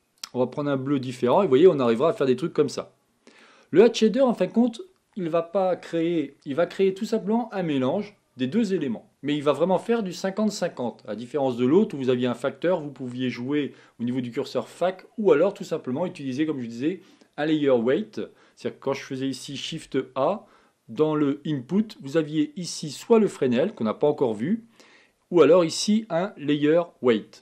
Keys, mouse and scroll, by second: 2.5-3.8 middle drag, 3.8-4.2 scroll up 2, 4.2-13.2 scroll down 2.